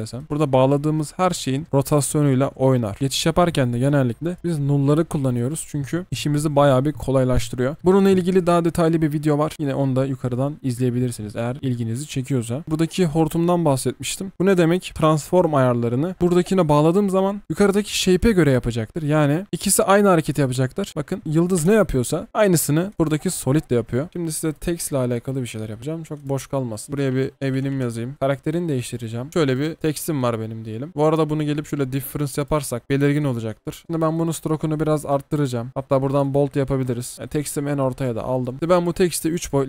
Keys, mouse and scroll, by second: 2.8 double click, 4.9 Delete, 12.6 ctrl+z, 21.2 space, 24.5 right click, 26.9 BackSpace, 28.4 double click, 29.5 double click, 29.8 v, 32.8 alt+scroll down 1, 37.1 alt+scroll up 1, 37.2-38.0 alt+scroll down 1, 38.4 double click, 38.5 v.